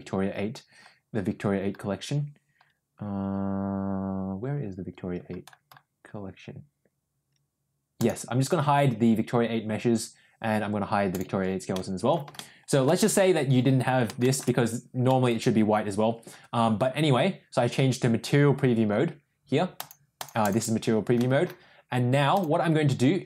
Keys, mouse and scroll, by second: 8.0 click, 11.0 click, 11.7 middle click, 12.3 shift+middle click, 12.6 shift+middle click, 14.1 shift+middle click, 15.0 middle click, 19.7 click, 20.1 click, 20.4 click, 21.1 middle click, 22.2 click.